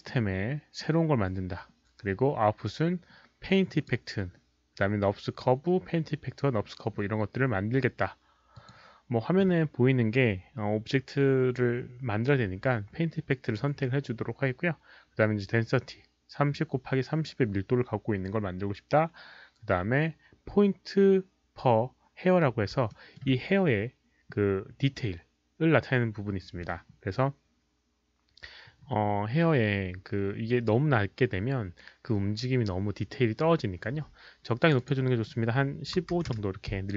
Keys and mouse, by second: 1.4 click, 2.9 click, 3.7 click, 8.5 click, 14.5 click, 22.9 alt+middle click, 34.6 click, 34.7 click, 35.9 KP_1, 36.3 Return, 36.3 click, 36.3 KP_5, 36.3 KP_1.